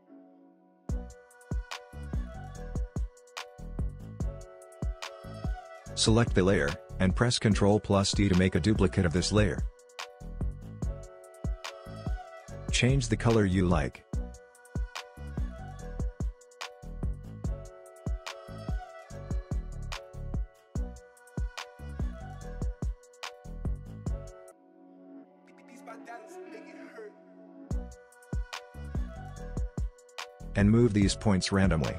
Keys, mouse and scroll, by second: 0.2-1.1 scroll down 1, 1.9 space, 2.8-5.3 drag, 9.2 ctrl+Num_Lock, 9.2 click, 9.7 ctrl+d, 13.0-20.1 drag, 23.4-27.5 drag, 30.8-31.9 drag.